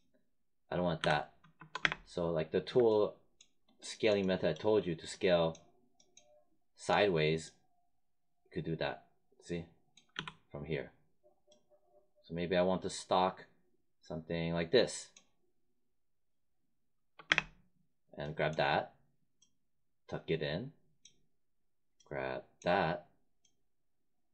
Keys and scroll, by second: 0.9 z, 1.7 space, 10.1 z, 17.2 space.